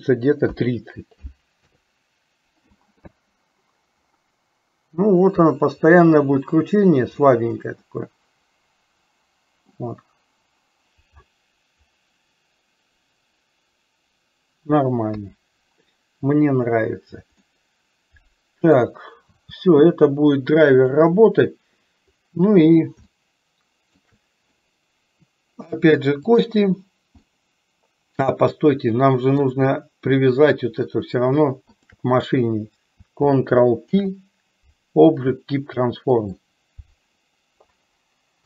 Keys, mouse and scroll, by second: 3.2 space, 8.1-10.0 middle drag, 15.2 KP_3, 17.7-19.0 middle drag, 19.8 space, 20.8 click, 23.3 shift+middle click, 27.3-29.8 middle drag, 30.4 click, 31.8 shift+click, 34.2 ctrl+p.